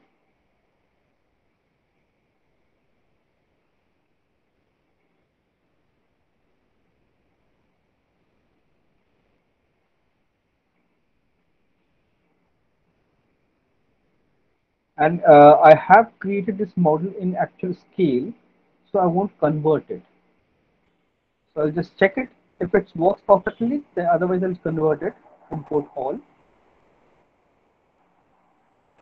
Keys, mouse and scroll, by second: 0.3 click, 1.9 click, 4.6 click, 6.2 click, 8.1 scroll, 9.9 click, 9.9-10.3 scroll, 19.3 click.